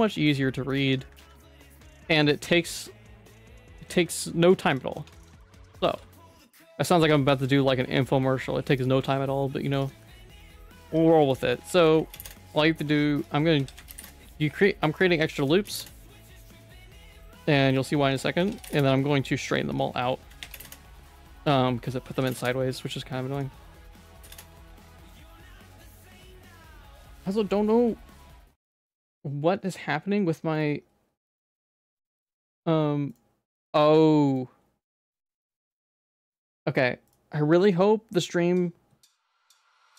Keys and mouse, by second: 0.9 Tab, 1.2 alt+x, 2.1 alt+x, 3.4 middle click, 3.8 alt+x, 4.7 click, 5.0 Tab, 5.1 middle click, 5.4 shift+middle click, 5.9 ctrl+r, 9.0 ctrl+r, 10.1 middle click, 10.9 2, 11.7 s, 13.6 s, 15.3 s, 16.6 middle click, 18.4 s, 20.3 s, 21.4 alt+click, 22.0 s, 23.3 alt+click, 23.8 s, 24.8 ctrl+s, 25.2 middle click.